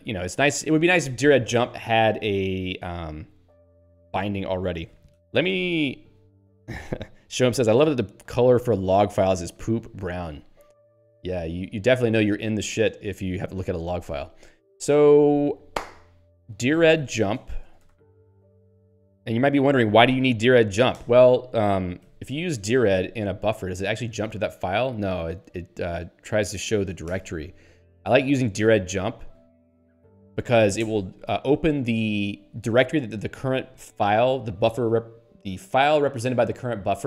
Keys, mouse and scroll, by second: 0.5 Down, 0.9 Up, 3.7 Up, 4.1 Down, 16.9-18.5 typing, 21.0 ctrl+g, 22.2 alt+x, 22.7-23.5 typing, 23.8 Return, 27.0 ctrl+g, 28.8 alt+x, 29.1-30.8 typing, 30.8 Return.